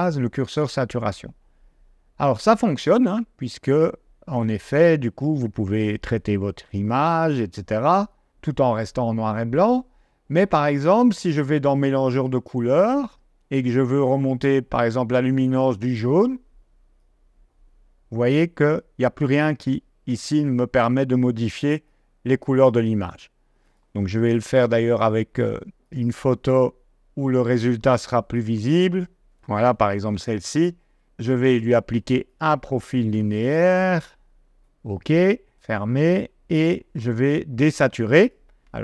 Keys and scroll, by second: 24.1 g, 29.8 d.